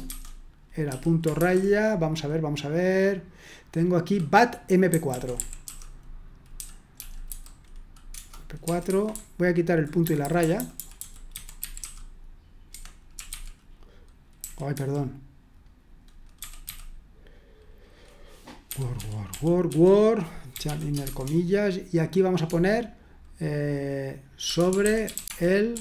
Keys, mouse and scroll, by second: 0.0-1.4 typing, 4.7-13.6 typing, 8.9 Escape, 12.7 Escape, 14.7 typing, 16.4 typing, 18.7-21.0 typing, 24.2-25.8 typing.